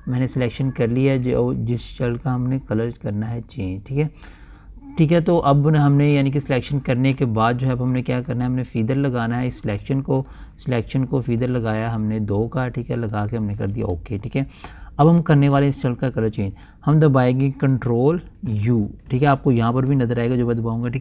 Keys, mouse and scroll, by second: 0.9 ctrl+alt+scroll down 1, 3.7 ctrl+alt+scroll down 1, 4.8 ctrl+alt+scroll down 1, 5.5-5.8 ctrl+alt+scroll down 1, 6.2 ctrl+alt+scroll up 1, 7.7-8.6 typing, 9.0-10.7 drag, 10.7 right click, 11.9 click, 20.2 ctrl+u.